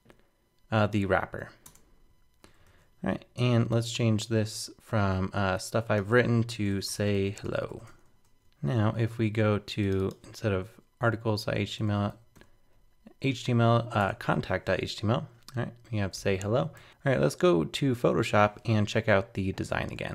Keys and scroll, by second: 2.7 super+s, 8.4 super+Tab.